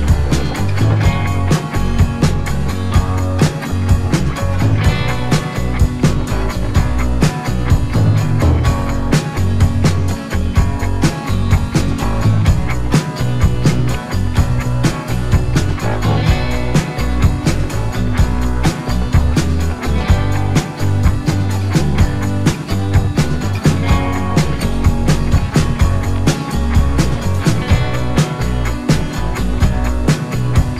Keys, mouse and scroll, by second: 5.4 click, 9.6 ctrl+t, 10.5 alt+scroll up 1, 11.8 click, 16.7 Left, 18.5 Return, 18.9 t, 19.9 click, 22.6-25.3 scroll down 1, 25.8-27.3 scroll down 1, 27.6 click, 28.6-30.6 scroll up 1.